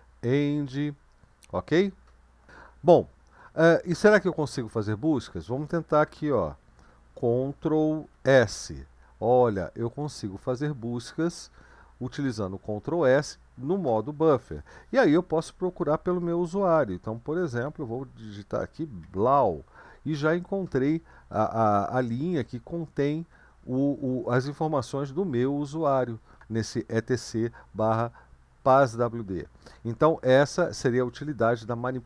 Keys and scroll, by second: 0.1 End, 2.5 Up, 2.7 Up, 2.9 Up, 3.2 Up, 3.4 Up, 3.9 Up, 4.1 Up, 4.8 Up, 4.9 Up, 5.1 Up, 8.5 ctrl+s, 17.7-19.7 typing.